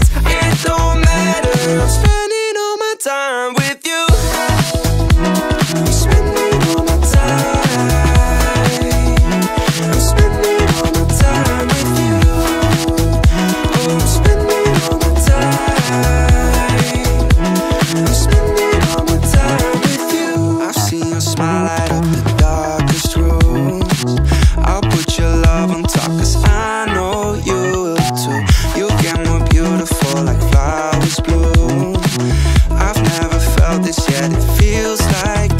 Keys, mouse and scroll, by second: 0.4-0.8 scroll up 2, 0.8 shift+middle click, 1.5 click, 3.7-4.8 drag, 5.6-7.2 drag, 7.9-8.5 scroll up 1, 9.3-12.3 drag, 13.1 click, 15.3 click, 16.7 click, 17.1-17.7 scroll up 1, 17.8-18.2 shift+middle drag, 19.4 click, 19.9-21.0 scroll up 4, 21.5 click, 22.2 click, 23.5 drag, 23.9-24.5 scroll down 3, 24.5-25.2 middle drag, 25.3-26.0 scroll down 2, 26.0-26.7 scroll up 3, 26.9 shift+middle drag, 27.7-28.1 scroll down 2, 28.2 shift+middle click, 28.6-29.0 scroll up 1, 29.1-29.4 shift+middle drag, 30.0-30.3 shift+middle drag, 30.9 click, 31.6-32.5 scroll up 1, 32.5 click, 33.9 click, 35.0 ctrl+a.